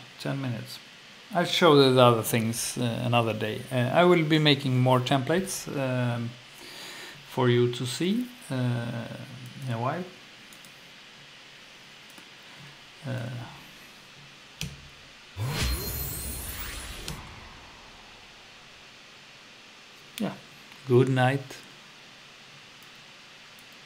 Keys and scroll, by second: 14.6 F2, 16.6 Down, 17.1 F2.